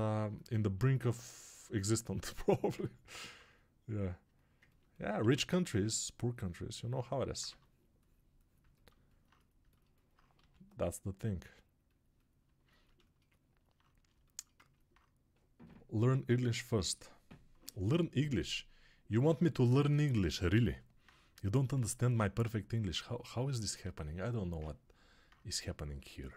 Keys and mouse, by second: 5.1 1, 7.4 2, 10.3 g, 23.0-26.3 alt+drag.